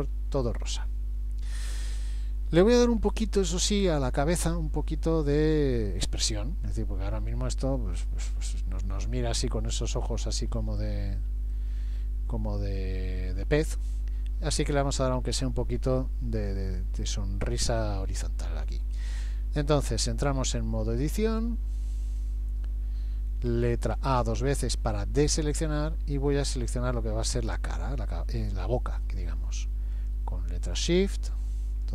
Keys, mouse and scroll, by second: 0.8-1.7 scroll up 1, 1.7 click, 1.7-2.2 scroll up 1, 3.3 middle click, 7.4 middle click, 10.5-11.1 scroll up 2, 11.5 shift+middle click, 21.3 click, 24.2 a, 24.4 a, 26.3 middle click, 30.0 click, 30.7 shift+click, 31.2 click, 31.8 shift+click.